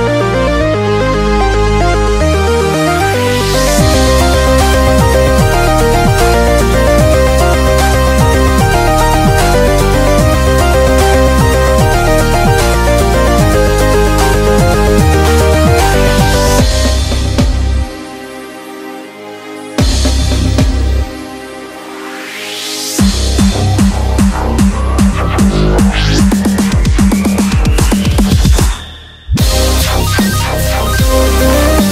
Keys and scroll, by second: 14.5 super+=.